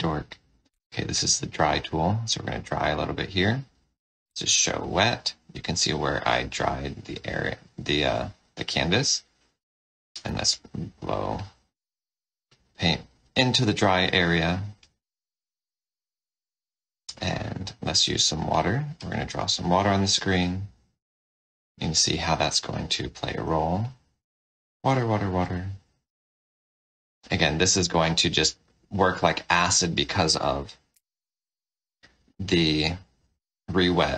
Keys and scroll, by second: 0.6 y, 3.3 y, 4.2 h, 6.7 h, 10.2 o, 12.7 o, 17.9 w, 23.3 w, 25.6 w, 30.9 o.